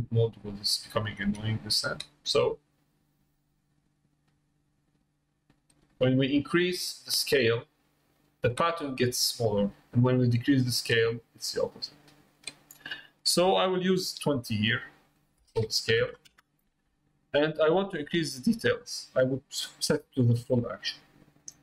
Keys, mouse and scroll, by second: 1.2 Tab, 3.2-5.7 drag, 6.8-8.3 drag, 10.3-12.7 drag, 15.1-17.2 drag, 20.0 click.